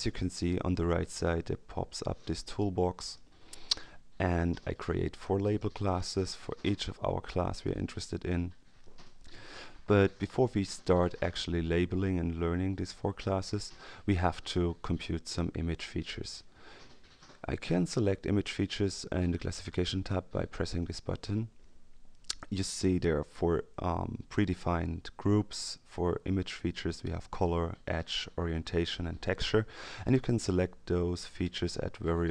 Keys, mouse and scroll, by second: 1.9-3.6 drag, 5.2 click, 20.7 click.